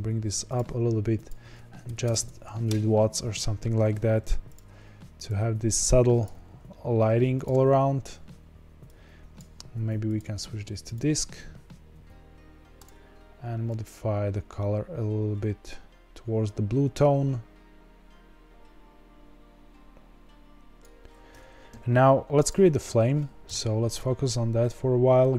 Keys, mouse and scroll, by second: 2.6 KP_0, 4.0 g, 5.2 click, 6.3 g, 8.8 click, 10.9-13.6 drag, 22.4 click, 23.4 KP_Decimal, 24.2-24.5 scroll down 3.